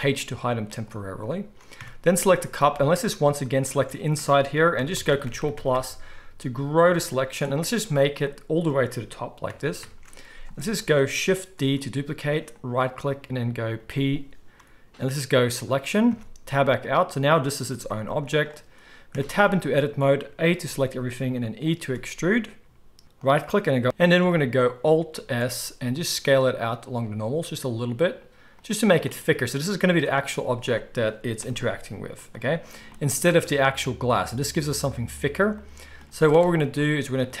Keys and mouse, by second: 0.7 click, 0.8-3.6 middle drag, 1.8 Tab, 2.7 alt+a, 3.6 alt+shift+click, 3.7-5.2 alt+shift+middle drag, 5.2-6.6 ctrl+drag, 6.6-16.8 ctrl+middle drag, 11.6 shift+d, 13.8 p, 16.1 Tab, 16.8 click, 16.9-24.8 middle drag, 17.7 g, 19.1 Tab, 20.6 a, 21.8 e, 23.8 alt+s, 25.1 alt+s, 30.4 z, 31.4 KP_1, 32.8-37.4 shift+middle drag, 36.0 z.